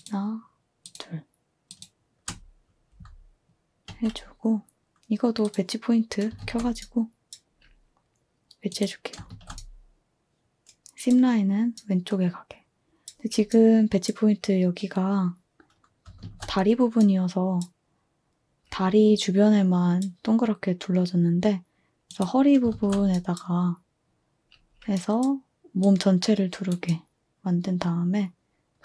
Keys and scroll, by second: 3.8 a, 6.4 f, 9.2 f, 16.2 f, 22.6 f.